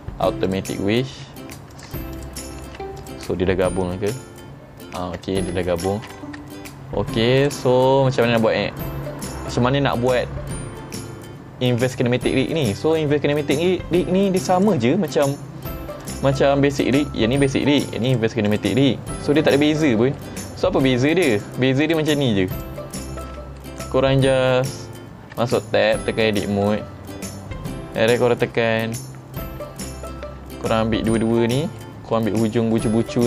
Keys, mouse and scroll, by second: 0.5 click, 1.8 click, 2.2 click, 2.7 ctrl+Tab, 3.1 click, 4.2 r, 5.2 right click, 6.0 ctrl+Tab, 6.5 middle drag, 7.5 click, 7.8-8.2 scroll up 3, 8.3-8.9 middle drag, 12.6-13.0 middle drag, 13.4-13.7 shift+middle drag, 14.6 click, 15.1 middle click, 16.1 click, 16.8 click, 18.1 click, 18.5 click, 20.2 middle click, 21.4 click, 21.9 click, 22.6 click, 23.3 Tab, 23.7 middle click, 25.9 click, 26.3 middle click, 27.2 middle click, 31.1 click, 31.8 middle click, 32.4 scroll up 3, 32.8 middle click.